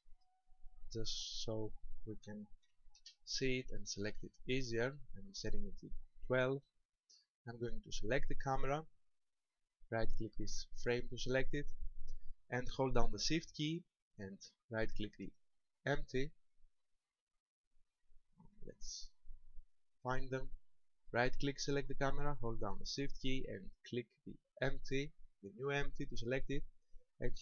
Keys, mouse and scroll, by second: 1.6 click, 7.8 right click, 9.6 right click, 15.2 shift+right click, 16.2 shift+right click, 16.9 shift+right click, 17.9 middle click, 18.9-19.5 scroll down 7, 20.6 right click, 24.3 shift+right click.